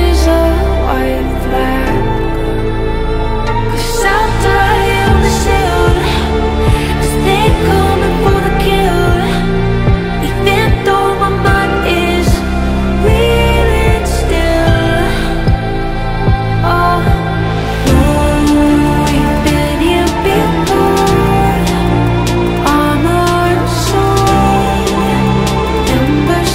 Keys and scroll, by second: 6.2 ctrl+q, 8.6 Delete, 10.3 Escape.